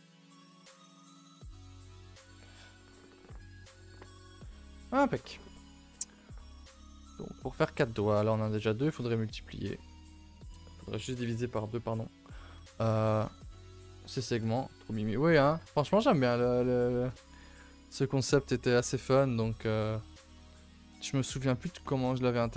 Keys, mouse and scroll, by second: 5.9 middle click, 6.2 scroll down 2, 6.5 shift+middle click, 6.8 a, 7.0 a, 7.3-8.8 middle drag, 8.8 a, 9.0 a, 9.7-12.9 middle drag, 12.9 scroll up 2, 13.0 a, 13.2 a, 13.4 2, 14.2 shift+middle click, 14.7-15.1 scroll down 2, 14.8 a, 15.1 middle click, 15.5-16.3 scroll down 3, 15.7 shift+middle click, 16.9 shift+middle click, 17.8 scroll up 2, 18.0 a, 18.2 a, 18.4-19.5 shift+middle drag, 19.5-20.0 scroll up 1, 20.0 scroll down 2, 20.5-22.5 scroll up 2.